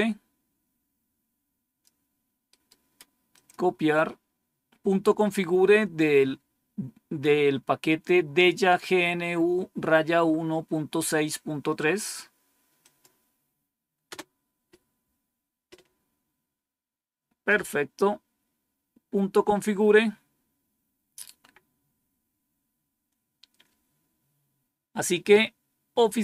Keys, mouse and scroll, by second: 2.4 right click, 3.3 click, 11.7 right click, 12.7 click, 14.0 Return.